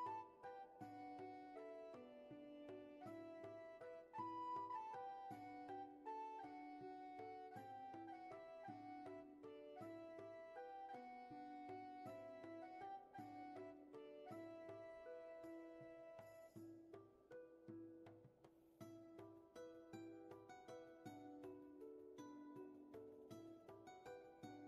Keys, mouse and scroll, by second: 1.3 ctrl+z, 2.1 space, 2.6 shift+space, 5.1 ctrl+z, 9.9 ctrl+z, 12.3 ctrl+z, 16.0 ctrl+z.